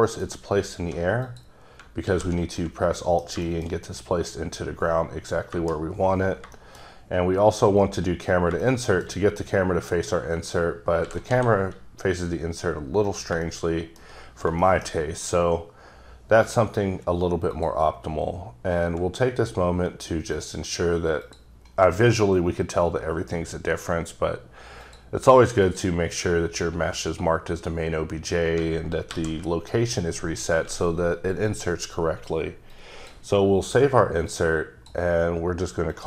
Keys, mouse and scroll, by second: 1.3 click, 2.0 g, 2.6 middle click, 3.7 shift+scroll up 2, 5.5 KP_0, 6.6 shift+middle click, 7.8 click, 8.7 shift+middle click, 10.4 click, 11.1 g, 11.3 z, 13.1 click, 13.5 shift+middle click, 14.3-14.6 shift+scroll up 3, 14.6 shift+middle click, 15.0 scroll up 1, 17.6 click, 20.4 click, 21.3 click, 24.9 click, 25.6 click, 28.6 alt+click, 29.1 alt+g, 32.9 click, 34.3 click, 35.9 click.